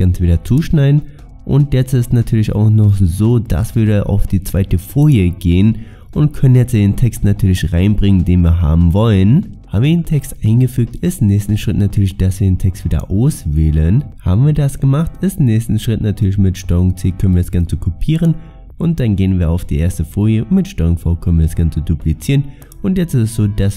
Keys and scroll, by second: 16.7 ctrl+c, 20.8 ctrl+v.